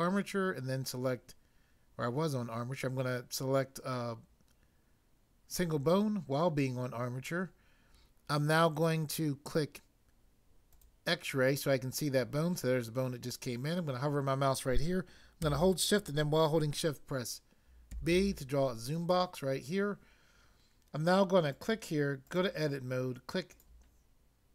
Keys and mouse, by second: 5.4 click, 10.7 click, 17.8 b, 18.3 click, 21.5 click, 22.2 click, 23.6 click.